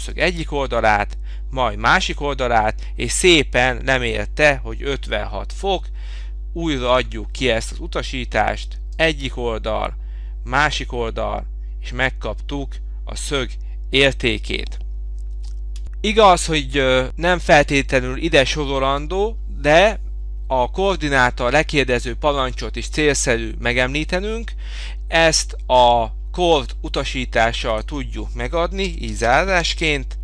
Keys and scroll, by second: 15.8 Return, 18.4 Escape.